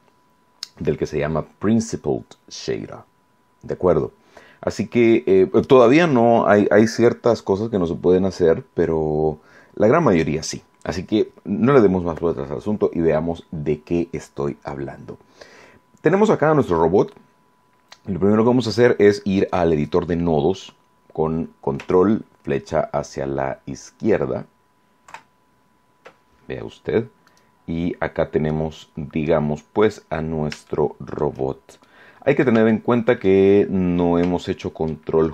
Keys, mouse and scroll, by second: 25.0 ctrl+Left, 27.2 right click, 28.4 middle click, 29.5-29.8 scroll up 2, 30.6 shift+click, 31.1 shift+middle click, 31.1-31.7 shift+scroll up 2, 31.7 middle click, 32.6 shift+middle click, 33.7 scroll down 1, 34.3 shift+middle click.